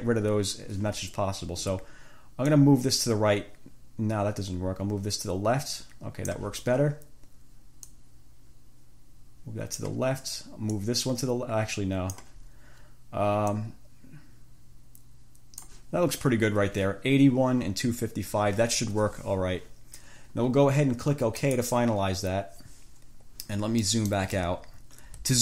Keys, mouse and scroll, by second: 2.7-6.7 drag, 8.1-10.2 drag, 11.0-12.6 drag, 13.7-16.1 drag, 21.6 click, 24.1 click, 24.9-25.2 ctrl+scroll down 2.